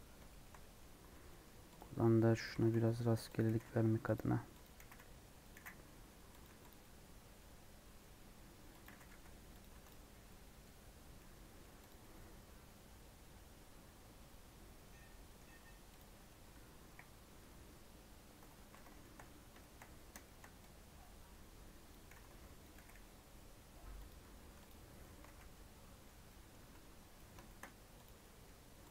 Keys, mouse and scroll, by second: 0.0 scroll down 3, 0.2 shift+middle click, 0.7 scroll up 1, 1.0 Tab, 1.2 middle click, 1.7 click, 1.9 scroll up 2, 2.4 click, 2.4 g, 3.5 g, 4.6 click, 4.8 g, 5.5 g, 6.4 Tab, 6.7 middle click, 7.3-7.9 scroll up 3, 8.0 middle click, 8.2 scroll up 1, 8.8 click, 9.6 Tab, 10.1 scroll down 2, 10.2 middle click, 10.7-11.1 scroll down 4, 11.2-15.0 middle drag, 15.5-15.9 scroll up 1, 15.9 click, 16.7 KP_1, 17.3 KP_3, 18.2 Tab, 18.6 alt+z, 18.9 shift+middle click, 19.1 scroll up 1, 19.5 shift+middle click, 19.9 scroll up 1, 20.2-21.8 shift+middle drag, 21.8 click, 22.1 g, 22.7 g, 24.3 Tab, 24.6 click, 24.8 scroll down 1, 24.9 middle click, 25.2 alt+z, 25.4-26.6 middle drag, 26.6 Tab, 26.7 scroll up 2, 27.1 middle click, 27.6-28.0 scroll up 2, 28.0 click, 28.1-28.9 middle drag.